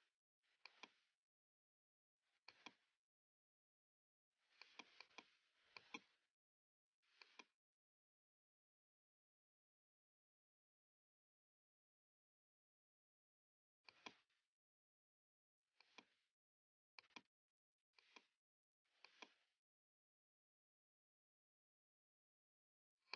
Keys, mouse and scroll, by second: 1.6 click, 3.1 shift+click, 4.7 click, 5.1 click, 5.8 shift+click, 7.3 shift+click, 8.0 typing, 9.1-13.5 typing, 10.3 Tab, 14.0 click, 14.7-15.2 scroll down 2, 15.2-15.9 scroll up 2, 15.9 click, 17.0 click, 18.1 click, 19.1 click, 19.8-21.0 typing, 23.1 typing.